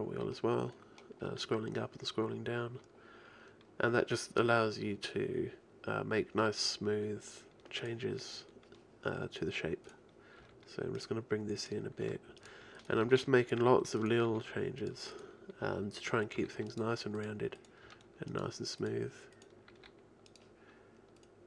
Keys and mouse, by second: 8.9 right click, 10.1-11.3 right drag, 10.4 g, 11.3-12.4 drag, 12.0 g, 13.0 g, 14.4 g, 16.4 right click, 16.4 g, 17.8-20.3 drag, 17.8 g, 19.7 g, 21.2-21.4 drag.